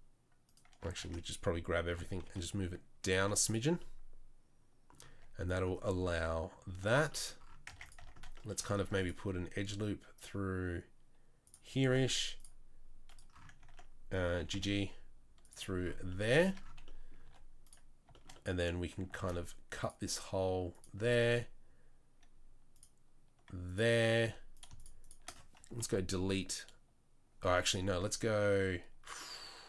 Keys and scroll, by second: 1.0 Tab, 1.9 g, 3.2 z, 5.1 Tab, 6.7 Tab, 6.9 Tab, 7.7 Tab, 8.0 Tab, 8.8 ctrl+r, 11.8 ctrl+r, 14.4 g, 17.2 3, 19.1 ctrl+r, 21.1 ctrl+r, 24.2 3, 25.8 Delete.